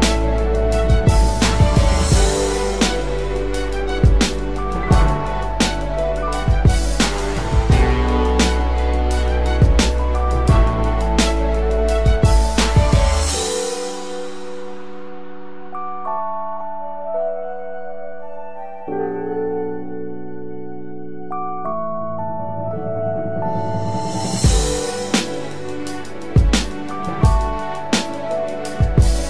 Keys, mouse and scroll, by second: 2.2 double click.